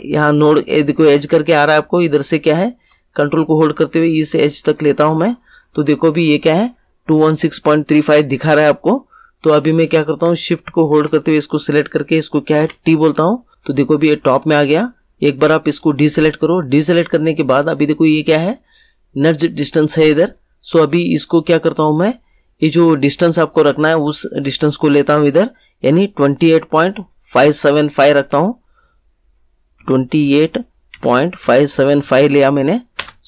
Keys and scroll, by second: 12.5 t, 29.7-32.4 typing, 32.9 Return.